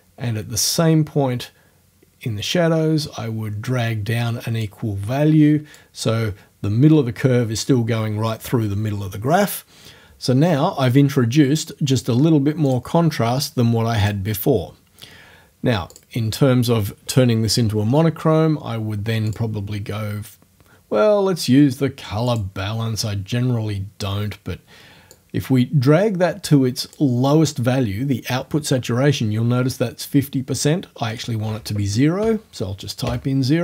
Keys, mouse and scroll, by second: 0.7-5.9 drag, 5.9-7.5 scroll up 1, 12.7 click, 12.9-14.0 scroll up 1, 14.0 click, 14.3-15.9 middle drag, 15.9 click, 16.2-17.4 middle drag, 19.3 click, 22.3 click, 25.1-27.1 drag, 31.1 right click, 32.3 0, 33.1 KP_Enter.